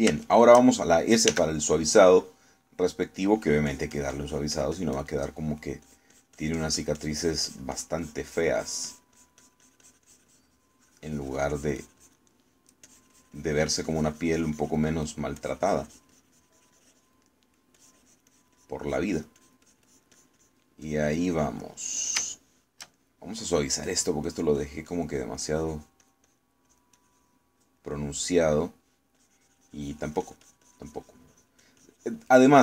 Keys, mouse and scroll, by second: 1.1-2.1 shift+middle drag, 2.3 shift+s, 2.7-4.0 shift+middle drag, 4.2 middle click, 4.7-6.3 drag, 6.3 middle click, 6.9-15.9 drag, 15.9 middle click, 16.5-18.3 drag, 18.3 middle click, 18.8-21.8 drag, 21.9-23.3 drag, 22.7 middle click, 23.5 shift+middle click, 24.8 click, 25.3-27.6 drag, 27.7-28.9 drag, 29.0 middle click, 29.5 middle click, 30.2-32.6 drag.